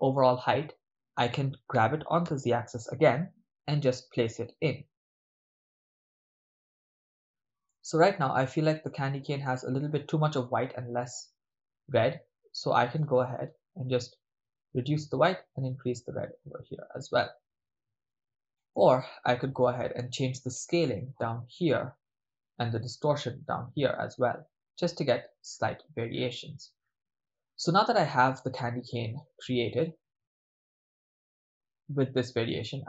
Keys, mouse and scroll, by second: 0.9 click, 1.7 g, 3.4 z, 7.1 click, 7.8-8.6 middle drag, 8.9-9.3 ctrl+middle drag, 9.6 shift+middle drag, 11.1-13.0 middle drag, 13.0-14.1 scroll up 1, 14.2-15.0 drag, 15.5-18.1 drag, 18.8 middle click, 20.1 ctrl+middle click, 20.9 middle click, 23.4 click, 23.9 click, 24.2 click, 24.4 click, 26.3-28.4 middle drag, 28.8 middle click, 30.3 click, 30.7 click, 32.5 middle click.